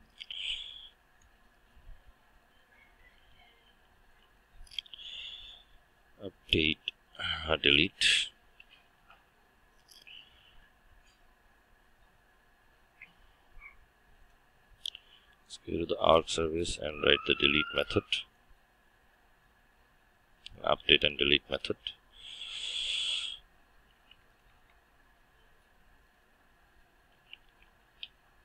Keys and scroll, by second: 20.7 ctrl+d.